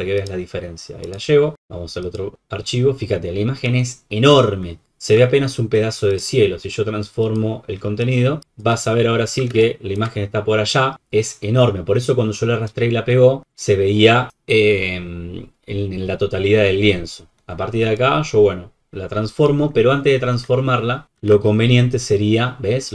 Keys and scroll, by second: 9.5 alt+space, 21.1 ctrl+t.